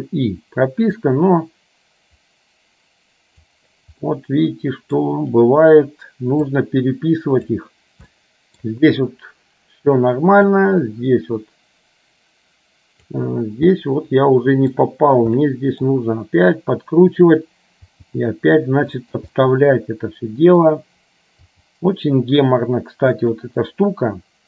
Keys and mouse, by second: 1.2-3.7 drag, 4.1-5.1 middle drag, 6.7-7.7 drag, 8.2 middle click, 10.7-13.4 drag, 13.9-14.9 middle drag, 15.5 middle click, 16.4 r, 18.0 g, 19.5-20.7 middle drag, 21.6 g.